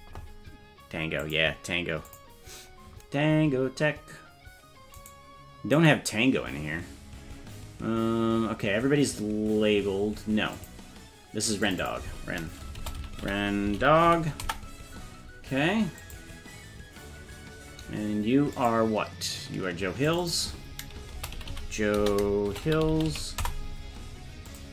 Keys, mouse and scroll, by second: 5.1 right click, 5.8 right click, 9.4-10.6 scroll up 1, 10.6 click, 10.6 scroll up 1, 11.7-15.1 drag, 16.0 click, 18.6 click, 20.1-23.9 drag, 23.0 l, 24.5 click.